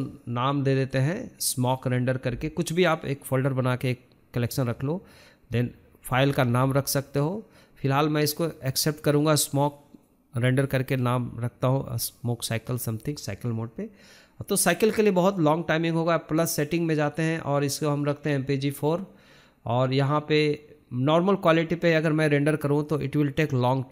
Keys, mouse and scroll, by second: 15.8-17.9 scroll down 3, 16.2 drag, 17.1 drag, 17.9-20.4 drag, 20.4-21.3 scroll down 1, 21.3-21.9 scroll down 1, 22.0-23.3 scroll up 1, 23.3-23.9 drag.